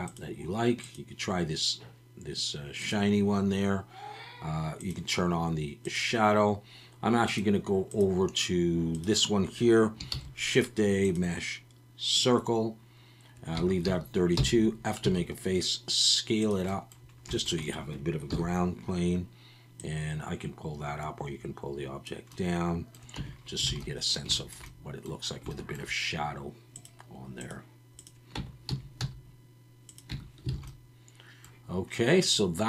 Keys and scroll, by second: 10.1 shift+a, 13.6 Tab, 13.9 a, 14.4 f, 15.0 s, 18.3 KP_1, 23.2 Tab, 23.7 alt+a, 28.4 Tab, 28.7 a, 29.0 s, 30.1 Tab, 30.5 alt+a.